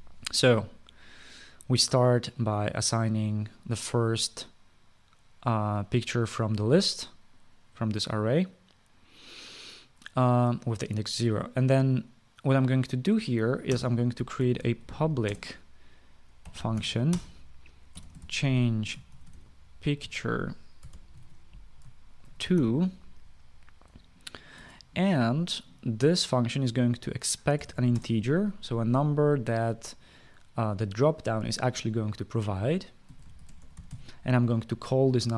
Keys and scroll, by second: 0.0-0.5 typing, 14.4-22.3 typing, 25.0-25.7 typing, 28.0-28.9 typing, 33.5-35.0 typing.